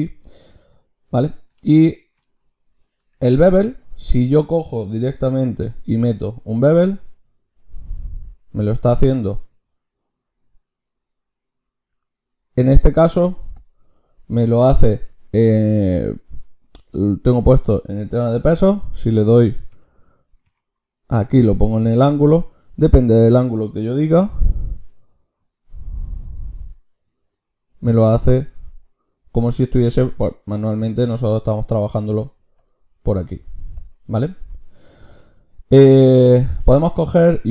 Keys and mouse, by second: 3.0 Tab, 3.1-6.2 drag, 5.5 ctrl+shift+q, 32.6-37.5 drag.